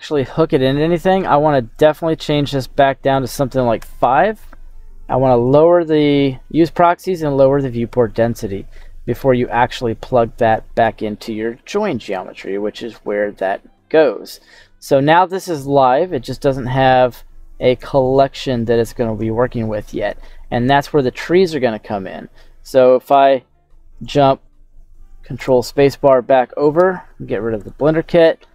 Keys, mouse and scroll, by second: 0.5 middle click, 1.7-3.8 drag, 5.4 click, 8.8 middle click, 9.6-10.5 scroll down 2, 10.5 click, 11.5 g, 12.9-14.4 drag, 14.4 middle click, 15.8 middle click, 16.3-17.1 scroll up 2, 17.1 click, 18.1 middle click, 18.1 scroll up 1, 19.2 shift+middle click, 20.3 middle click, 24.0 right click, 25.5 ctrl+space, 26.2 middle click, 27.6 click.